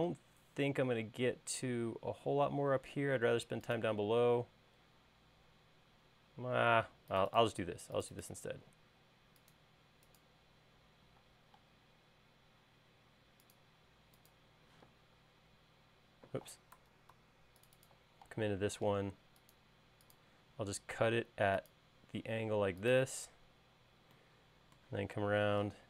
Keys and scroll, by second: 8.9 l, 11.6 space, 15.2 p, 16.7 space, 17.3 super+z, 18.7 l, 21.0 l.